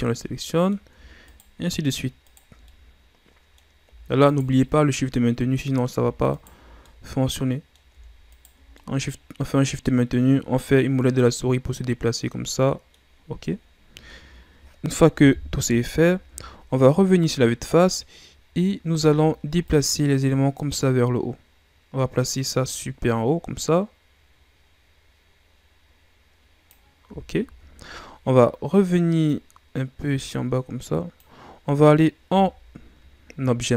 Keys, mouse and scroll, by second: 0.1-1.2 middle drag, 1.2 shift+right click, 2.2 shift+right click, 2.6-4.3 middle drag, 4.3 shift+right click, 4.6-6.3 middle drag, 6.3 shift+right click, 6.8-8.3 middle drag, 8.3 shift+right click, 8.7-14.3 middle drag, 15.2 KP_1, 16.6-19.6 shift+scroll up 2, 19.6-22.7 drag, 27.8-29.3 scroll up 1, 29.3-32.3 drag, 32.3 Tab.